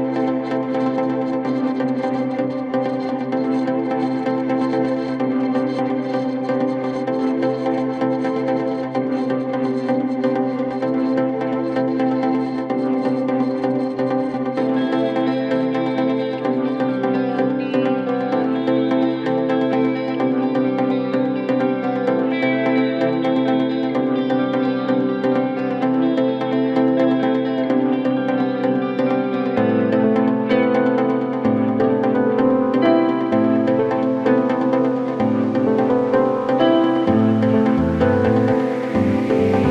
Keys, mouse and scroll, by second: 0.5-0.9 scroll down 1, 0.9 Tab, 1.9 a, 2.8 3, 3.8 Tab, 4.5 ctrl+a, 6.5 Tab, 7.6 click, 9.6-15.0 drag, 15.0-15.4 scroll up 1, 15.4-15.8 scroll down 2, 15.8-18.9 middle drag, 19.7 KP_7, 20.7 KP_1, 21.7 middle click, 22.1-23.0 scroll up 2, 23.0 middle click, 23.6 KP_7, 24.2-25.2 scroll up 1, 25.2 click, 26.3-27.4 middle drag, 27.4-28.4 scroll up 1, 28.4-29.3 KP_Add, 29.9 KP_Add, 31.9 KP_Decimal, 32.8 middle click, 33.5-34.8 scroll up 2, 34.8 KP_Add, 35.9-36.6 scroll down 3, 36.7 x, 38.2-38.5 scroll down 5, 38.5 middle click, 39.1-39.7 scroll up 7.